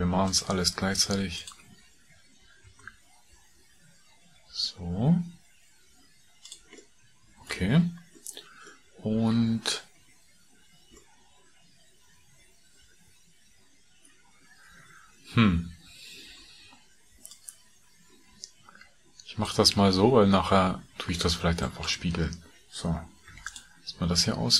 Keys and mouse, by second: 0.1 shift+click, 2.5 ctrl+b, 6.8 middle click, 19.9 a, 21.0 middle click, 21.8 click, 23.2 3, 23.5 click.